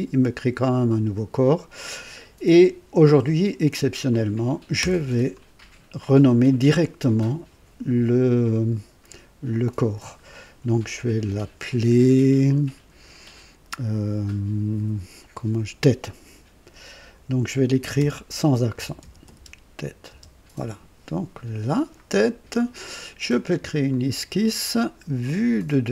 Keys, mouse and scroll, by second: 4.0 click, 4.8 F2, 17.9-20.0 typing, 20.2 Return, 23.8 click, 25.5 click.